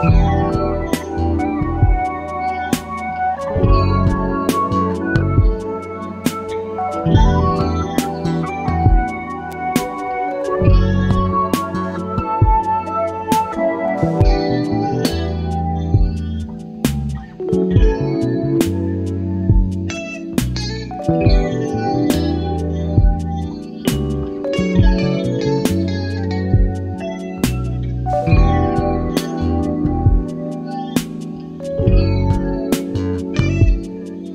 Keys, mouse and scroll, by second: 0.4 ctrl+d, 4.1 shift+click, 7.5 click, 8.3 click, 10.5 click, 11.8 click, 13.3 shift+click, 14.9 click, 15.8 KP_5, 17.6-18.2 ctrl+scroll up 4, 18.5 ctrl+click, 19.7 click, 21.8 ctrl+d, 23.4-25.2 ctrl+shift+drag, 28.9 ctrl+shift+click, 30.7 ctrl+d, 30.9-34.3 ctrl+drag.